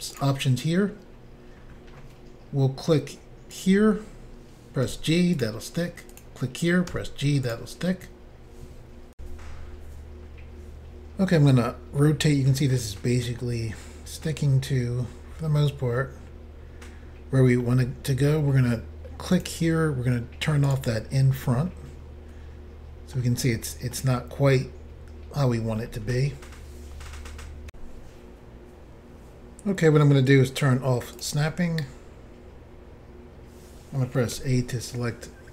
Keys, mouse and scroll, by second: 0.1 click, 0.2 click, 3.5 click, 3.6 click, 4.9 g, 5.4 click, 6.1 click, 7.5 click, 7.5 g, 9.2 Insert, 11.3 middle click, 13.4 middle click, 19.3 click, 19.4 click, 20.7 click, 20.7 click, 21.5 middle click, 23.9 middle click, 27.7 Insert, 31.1 click, 31.2 click, 34.3 a.